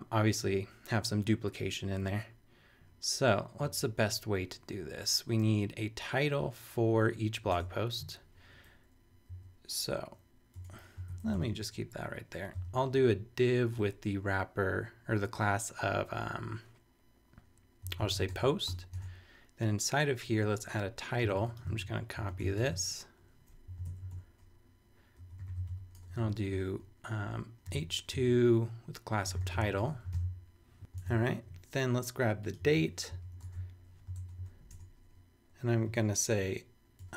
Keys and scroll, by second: 7.6 super+Tab, 9.3 Down, 10.6 BackSpace, 11.1 super+Right, 11.3 super+Return, 17.6-18.7 typing, 19.0 super+Tab, 21.2 t, 21.8 super+a, 22.2 super+c, 22.4 super+Return, 22.6 super+Tab, 23.7 super+Up, 23.8 super+Right, 24.1 super+Return, 25.1 Return, 25.1-26.2 typing, 27.4-30.1 typing, 30.1 super+v, 31.0 super+Tab, 32.7 super+a, 33.1 super+c, 33.3 super+Return, 33.4 super+Tab, 34.1 super+Return, 34.7 super+Tab, 35.4 Tab, 37.0-37.1 typing.